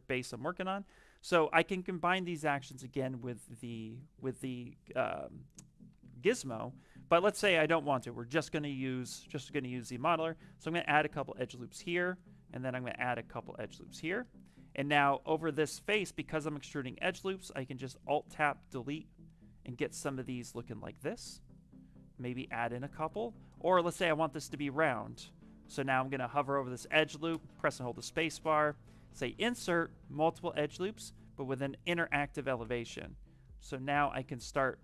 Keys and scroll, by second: 4.2 w, 5.8 q, 23.2 ctrl+z, 24.4 space, 27.2 space.